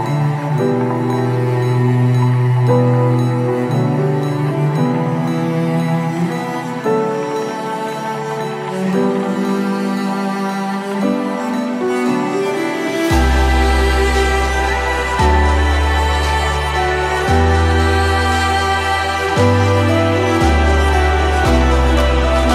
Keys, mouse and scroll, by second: 0.3 ctrl+z, 2.3 click, 2.8 click, 3.9-5.9 right drag, 5.9 click, 7.1 click, 9.0 click, 11.3 click, 13.2 click, 15.0-19.1 right drag, 19.1 space, 20.3-22.5 drag.